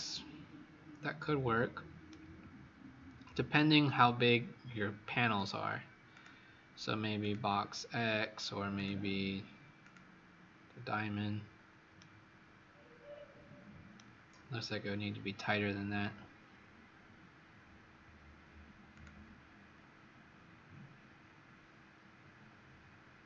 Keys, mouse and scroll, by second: 6.0 click, 11.9 right click, 18.9 click.